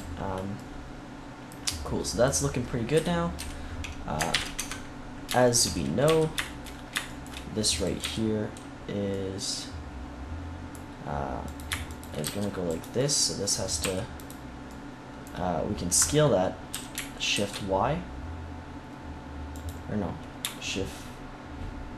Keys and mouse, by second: 3.0 KP_3, 3.3 KP_1, 4.2 ctrl+KP_3, 4.5 Tab, 5.9 z, 7.9 z, 11.4-13.7 middle drag, 12.1 c, 13.7 e, 16.6 s.